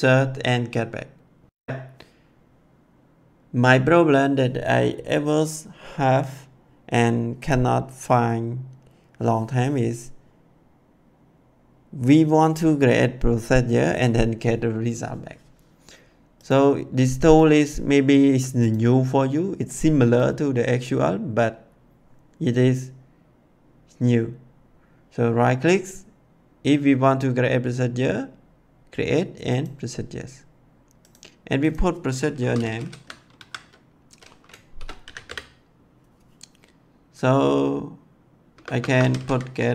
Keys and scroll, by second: 32.0-33.3 typing, 34.4-35.6 typing, 38.4-39.7 typing.